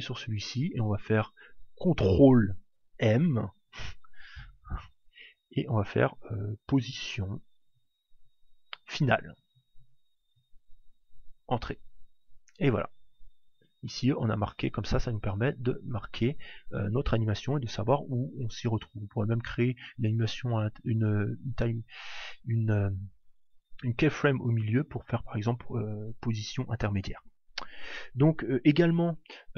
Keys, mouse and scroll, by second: 3.4 ctrl+m, 14.5 click.